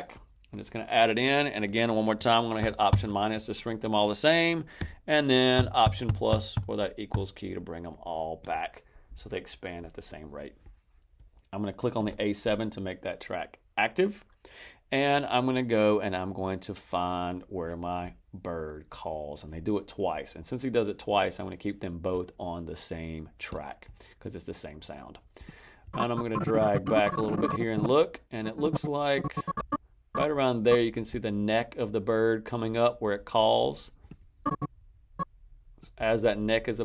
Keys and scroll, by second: 2.5 alt+-, 5.4 alt+=.